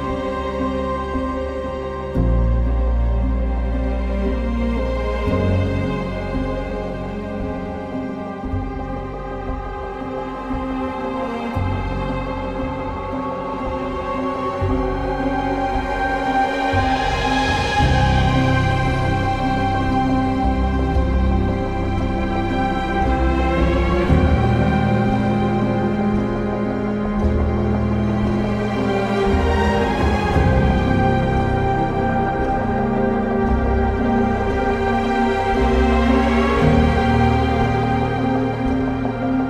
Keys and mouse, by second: 0.0 click, 1.8 KP_3, 3.1 ctrl+r, 3.5 click, 4.8 1, 5.2 alt+z, 6.4 g, 6.5 g, 8.1 click, 9.7 ctrl+r, 10.0 click, 10.8 click, 12.0 g, 13.0 click, 14.2 ctrl+r, 14.6 click, 15.2 click, 15.9 g, 16.1 y, 16.7 click, 19.8 3, 20.9 2, 22.5 g, 22.8 z, 23.7 1, 24.4 ctrl+click, 25.2 g, 25.5 z, 25.8 click, 29.3 g, 29.4 g, 30.1 click, 31.2 ctrl+r, 31.7 right click, 32.8 ctrl+r, 33.1 click, 34.1 1, 35.3 g, 35.4 g, 36.5 click, 37.0 2, 38.7 ctrl+b.